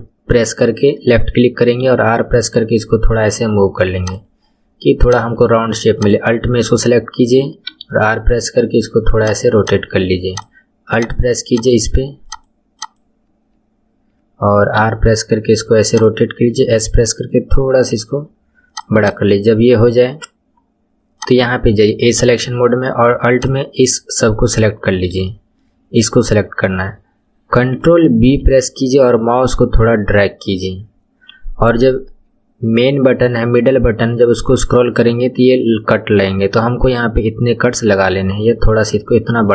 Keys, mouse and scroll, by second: 1.8 r, 5.0 click, 6.0 alt+click, 7.6 r, 9.6 click, 10.2 alt+click, 10.9 alt+click, 11.5 alt+click, 12.2 alt+click, 12.8 alt+click, 14.8 r, 16.5 s, 19.0 click, 21.2-23.4 drag, 24.5-25.2 scroll up 4, 25.2-28.4 shift+middle drag, 28.4 ctrl+b.